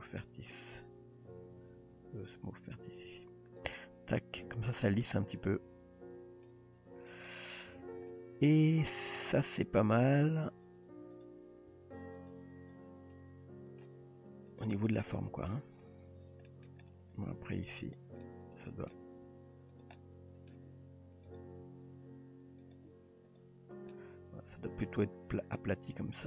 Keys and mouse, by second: 4.6-5.0 middle drag, 6.5-7.1 middle drag, 7.3 shift+middle drag, 8.1-8.5 middle drag, 9.1 middle click, 9.9 g, 11.7 g, 13.1-13.8 middle drag, 14.0 g, 15.2-15.5 middle drag, 15.6 Tab, 16.5 middle click, 17.4 Tab, 17.9 click, 18.3 middle click, 19.3 s, 20.0 middle click, 20.7 g, 21.6 r, 22.9 g, 23.9-24.9 middle drag.